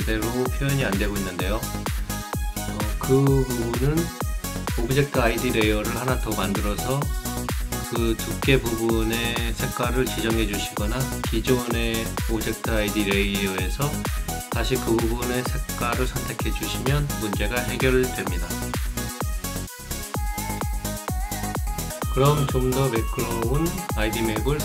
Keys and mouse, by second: 0.1 click, 0.7 right click, 4.7 click, 12.6 click, 15.0 click, 17.3 click, 18.0 click, 19.0 click, 19.4 click, 20.8 click, 22.3 click, 24.2 click.